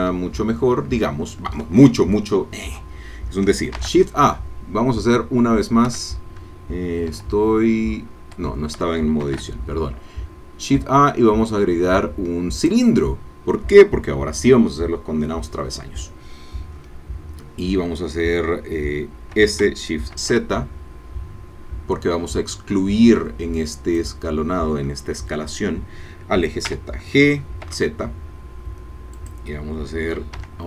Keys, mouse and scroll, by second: 0.6-2.0 shift+middle drag, 3.7 shift+a, 5.9 Escape, 7.1 Tab, 8.5 Tab, 9.2 shift+a, 12.6 click, 19.4 s, 20.1 shift+z, 24.0-26.6 drag, 26.6 g, 27.6 z, 29.2-30.3 drag, 30.5 Tab.